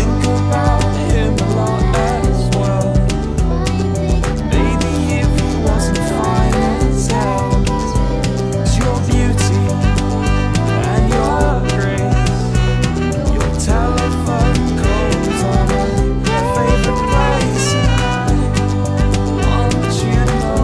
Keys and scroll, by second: 2.8 p, 4.6 n, 13.8 F9.